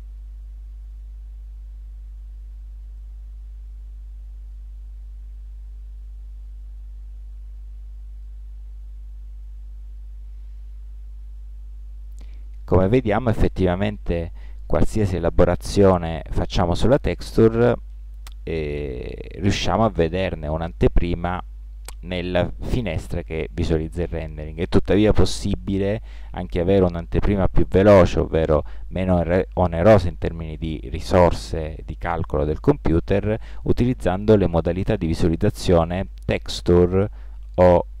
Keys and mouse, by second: 1.3 middle click, 1.7-2.3 middle drag, 7.5-9.4 drag, 34.8 click, 37.4 click.